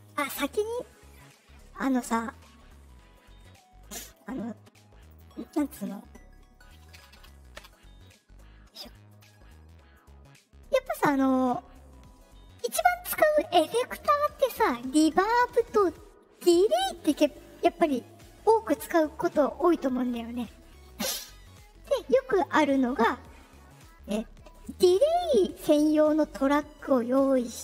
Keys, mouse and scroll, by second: 5.0 click, 5.6 click, 9.0 right click, 23.8 click.